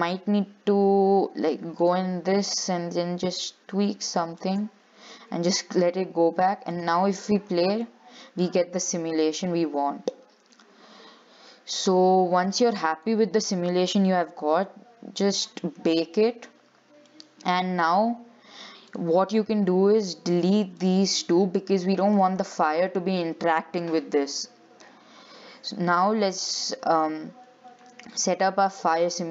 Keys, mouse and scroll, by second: 2.0-4.8 drag, 6.9 click, 7.6-8.0 scroll up 5, 8.0-9.5 middle drag, 9.5-10.0 scroll down 6, 10.0 shift+middle click, 10.3-10.8 scroll up 3, 12.6-14.0 drag, 14.0-15.5 scroll down 8, 15.5-17.0 drag, 17.0-17.3 scroll down 3, 17.3 middle click, 17.8-18.6 scroll up 6, 19.1 click, 20.2 shift+click, 20.8 x, 22.0-24.3 shift+middle drag, 24.3-24.9 scroll down 3, 24.9-25.5 scroll up 1, 28.3-29.3 drag.